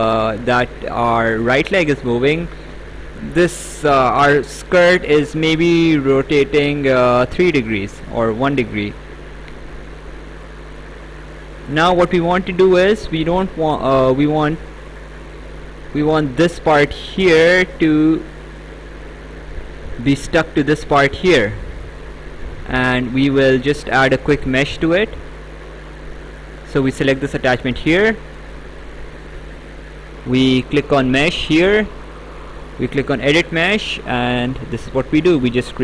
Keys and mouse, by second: 22.0 click, 26.6 click, 31.5 click, 32.6 click.